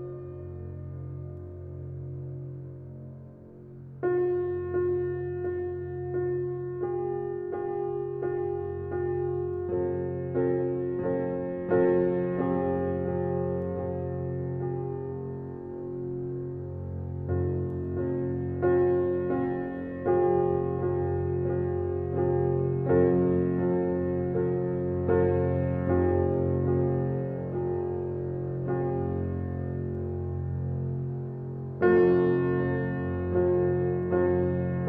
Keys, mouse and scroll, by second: 10.3 click, 12.1 typing, 30.9 click, 32.7 scroll up 1, 33.4 click, 33.8-34.8 scroll down 1.